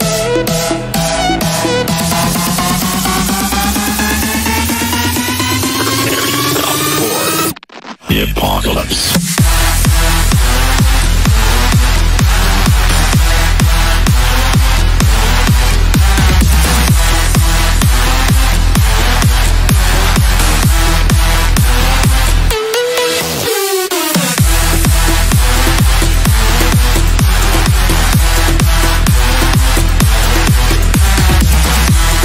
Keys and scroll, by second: 5.2 Escape, 5.3 F3, 5.5 Escape, 6.2 Escape, 7.1 shift+F2, 7.2 F3, 11.7 Escape, 17.1 F3, 17.7 Escape, 20.3 Escape, 20.5 ctrl+z, 21.2 Escape.